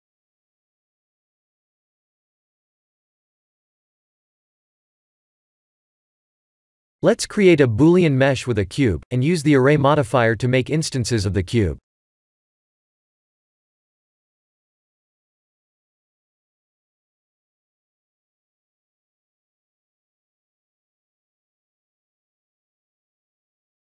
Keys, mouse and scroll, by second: 0.6-1.5 scroll down 2, 1.0 middle click, 2.7 Tab, 3.1 click, 3.5 Tab, 4.0 click, 4.3 middle click, 5.0 KP_1, 6.2 shift+z, 6.9 click, 7.1 shift+a, 10.3 s, 12.1 g, 13.9-14.3 scroll up 4, 14.3 shift+middle click, 15.0 scroll up 1, 15.5 s, 16.3 g, 17.4 s, 18.2 g, 19.7 Tab, 20.7 click, 21.2 g, 23.2 middle click.